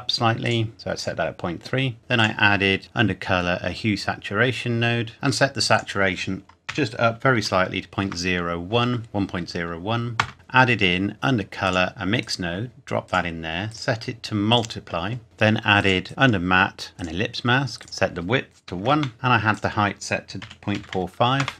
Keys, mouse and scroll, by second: 2.1 click, 5.7 click, 6.6 KP_1, 7.3 KP_Decimal, 8.0 KP_0, 8.7 KP_1, 10.1 KP_Enter, 10.3 Delete, 11.1 click, 15.2 middle click, 15.8 click, 18.7 KP_1, 18.9 KP_Enter, 19.5 click, 20.4 KP_Decimal, 20.7 KP_4, 20.8 KP_5, 21.4 KP_Enter.